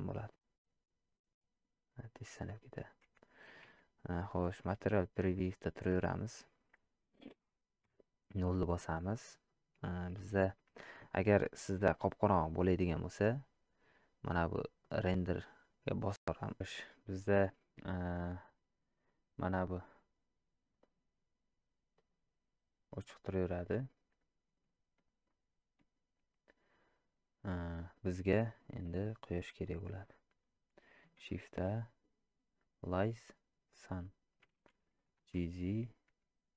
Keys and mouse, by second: 5.7-6.1 middle drag, 9.4 shift+middle click, 14.9 click, 17.5-23.3 drag, 29.0-29.8 middle drag.